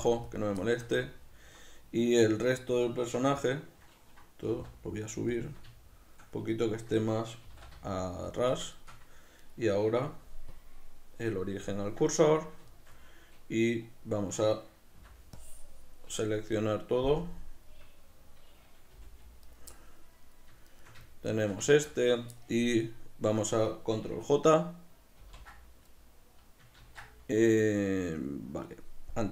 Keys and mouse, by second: 0.5 click, 0.7-5.5 shift+middle drag, 2.3 a, 5.5 shift+click, 5.8-8.5 shift+middle drag, 7.5 g, 8.5 shift+click, 8.8 shift+middle click, 9.5-10.6 right drag, 10.6-12.3 drag, 12.3-19.6 ctrl+middle drag, 15.0 b, 17.2 KP_Decimal, 19.0 g, 19.6 right click, 20.7-22.0 shift+right drag, 22.0-29.3 middle drag, 25.7 ctrl+j, 26.9 ctrl+z.